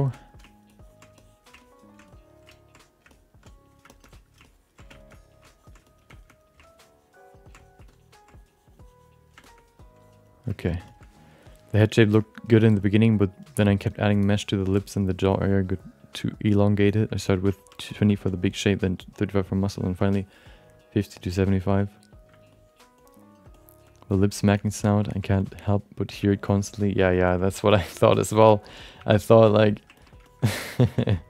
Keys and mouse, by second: 0.1 alt+middle click, 0.4 ctrl+click, 0.8 ctrl+click, 1.1 alt+middle click, 1.6 ctrl+click, 2.1 alt+middle click, 2.7 click, 3.1 alt+middle click, 3.4 click, 3.9 shift+middle click, 4.0 alt+middle click, 4.4 ctrl+click, 4.9 alt+shift+middle click, 5.1 middle click, 5.4 ctrl+click, 5.8 alt+middle click, 6.1 alt+shift+middle click, 6.6 ctrl+click, 7.6 alt+middle click, 7.9 ctrl+click, 8.3-9.3 drag, 9.4 shift+middle click, 9.6 alt+middle click, 10.0 click, 10.6 alt+middle click, 10.8 shift+middle click, 16.9 alt+shift+middle click, 17.2 alt+middle click, 17.6 ctrl+alt+middle click, 17.9 alt+shift+middle click, 22.5 alt+shift+middle click, 23.0 alt+middle click, 23.5 alt+shift+middle click, 23.9 alt+middle click, 24.3 alt+shift+middle click, 24.6 alt+middle click, 25.1 ctrl+alt+middle click, 25.4 alt+shift+middle click, 25.6 alt+middle click, 26.3 ctrl+alt+middle click, 26.6 shift+middle click, 26.8 alt+middle click, 27.3 ctrl+middle click, 27.7 shift+middle click, 27.9 alt+middle click, 28.4 ctrl+alt+middle click, 29.0 1, 29.4 alt+shift+middle click, 29.6 alt+middle click, 29.9 ctrl+alt+middle click, 30.2 shift+middle click, 30.5 middle click, 30.9 f, 31.1 alt+shift+middle click.